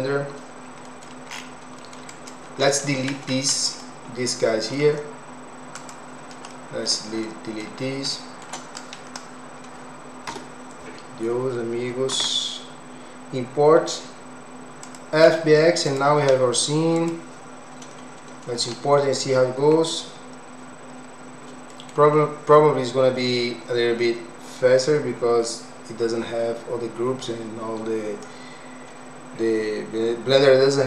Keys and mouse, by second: 3.8-4.8 alt+middle drag, 5.8 click, 6.6 alt+middle click, 7.3 middle click, 8.1 shift+middle click, 8.8 click, 10.8 Delete, 12.1 ctrl+s.